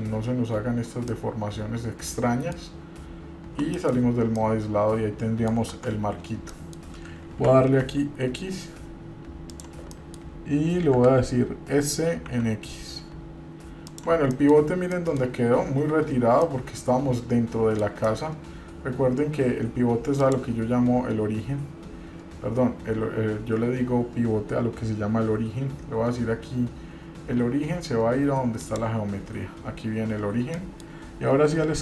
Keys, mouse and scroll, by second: 0.2 click, 1.3-2.8 middle drag, 4.6-5.7 middle drag, 5.9 Tab, 6.7 middle click, 7.5 g, 10.1 middle click, 11.2 s, 14.5 middle click, 15.1 middle click, 16.6-18.3 middle drag, 19.1-20.3 scroll down 2, 20.4-29.0 drag, 30.8 middle click.